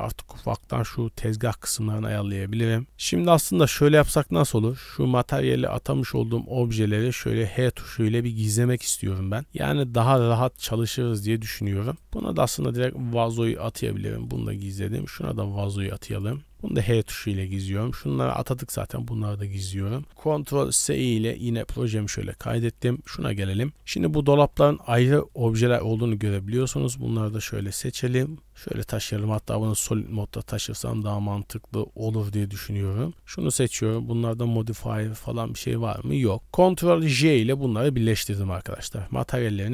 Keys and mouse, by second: 0.4 shift+middle click, 2.4 middle drag, 3.0-3.6 middle drag, 3.8-4.1 middle drag, 4.6 middle click, 5.0 h, 7.1 click, 7.9 h, 8.7-9.1 middle drag, 9.4 h, 9.7 click, 10.3 middle drag, 10.8 click, 11.3 h, 11.9 click, 12.7 click, 13.9 h, 14.3 middle drag, 15.0 click, 16.1 click, 16.5 h, 16.8 middle click, 17.3 b, 18.5 h, 19.1 middle click, 19.6 shift+middle click, 20.1 ctrl+s, 21.4 shift+middle drag, 21.7 middle drag, 22.4 shift+middle click, 23.0 middle click, 23.8 g, 24.5 shift+middle click, 25.3 click, 25.7 b, 26.8 shift+click, 27.1 b, 28.1 g, 28.4 drag, 29.0 z, 29.5 shift+drag, 29.9 g, 31.2-31.5 drag, 32.1 shift+drag, 35.1 shift+click, 37.1 ctrl+j, 37.7 middle drag, 38.8 click, 39.3 middle click.